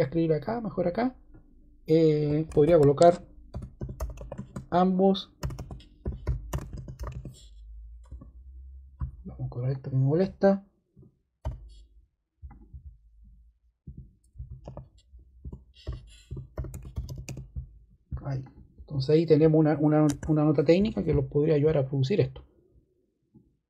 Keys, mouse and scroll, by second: 0.7 click, 2.5-8.0 typing, 9.6 click, 11.3 o, 12.4 click, 14.0-17.7 typing, 15.3 Return, 20.0 ⟲.